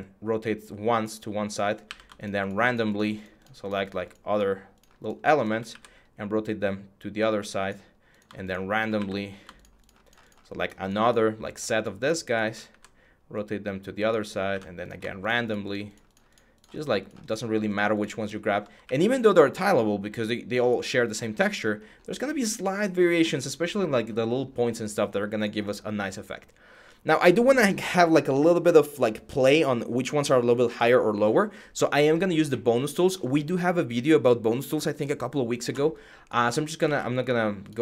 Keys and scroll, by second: 1.6 q, 5.4 e, 8.7 q, 12.4 e, 14.3 q, 18.6 e, 36.6 ctrl+z.